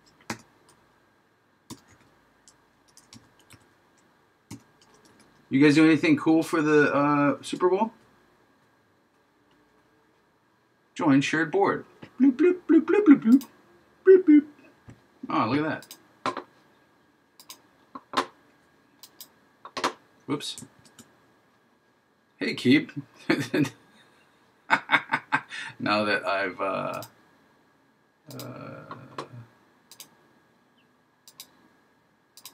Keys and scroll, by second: 20.8 super+z.